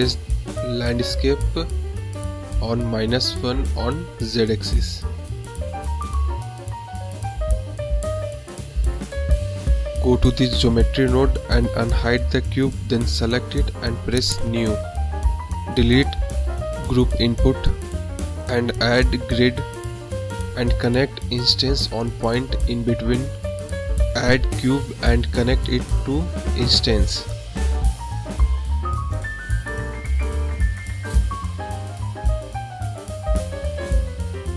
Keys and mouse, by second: 1.6 g, 10.1 click, 11.3 click, 12.6 click, 13.1 click, 13.9 click, 14.4 click, 15.5 x, 15.8 shift+a, 19.2 click, 20.2 click, 21.3 shift+a, 26.6 click, 27.3 click, 28.3 shift+a, 31.9 click, 34.0 middle click.